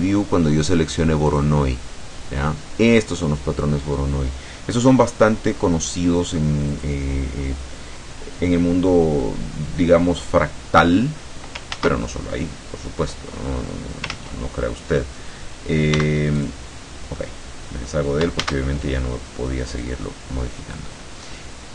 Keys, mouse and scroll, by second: 1.3 click, 6.8 click, 8.1-9.5 middle drag, 11.8 ctrl+z, 14.2 ctrl+z, 16.0 x, 16.5 click, 17.2 middle click, 18.5 shift+a, 19.8 click.